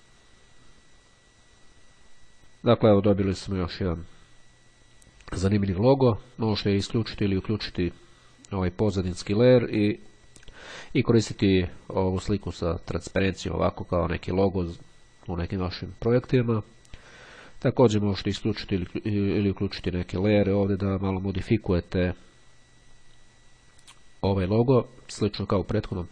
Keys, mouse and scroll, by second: 3.9-4.4 scroll down 1, 6.7 click, 9.3 click, 10.2 click, 19.2 click, 19.4 click.